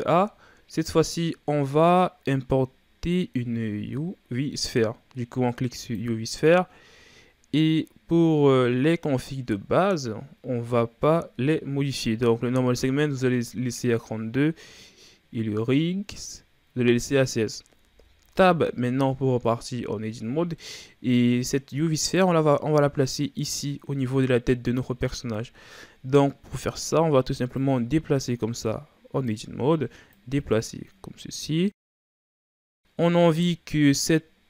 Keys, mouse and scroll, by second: 17.8 Tab, 18.9-19.7 shift+scroll up 4, 19.7 scroll up 1, 20.2-20.6 scroll down 2, 20.6 middle click, 21.6-24.1 scroll up 2, 24.1-25.2 middle drag, 25.2-26.1 scroll down 1, 26.1-27.6 middle drag, 27.6-32.0 drag, 32.0-33.7 middle drag, 33.7-34.4 scroll up 2.